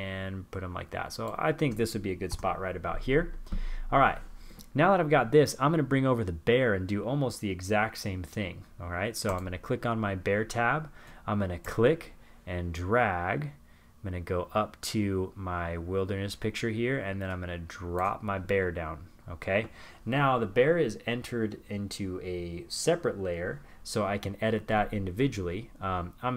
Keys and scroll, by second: 25.6 super+=.